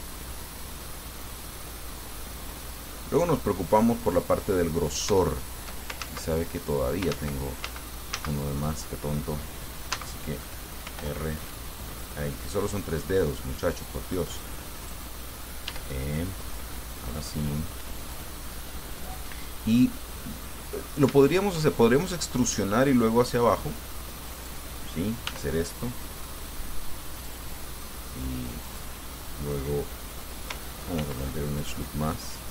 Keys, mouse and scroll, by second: 3.9 click, 4.1-5.5 middle drag, 5.6 shift+click, 6.3 ctrl+shift+z, 7.4 ctrl+z, 10.2 ctrl+z, 11.2 ctrl+r, 11.7 ctrl+scroll up 2, 12.3 click, 12.8 click, 14.3 click, 15.0 right click, 15.9 e, 19.3 click, 20.7-21.9 middle drag, 24.6 right click, 25.5 e, 27.4 click, 27.7 middle click, 28.9 right click, 31.2 ctrl+r, 31.7 ctrl+click.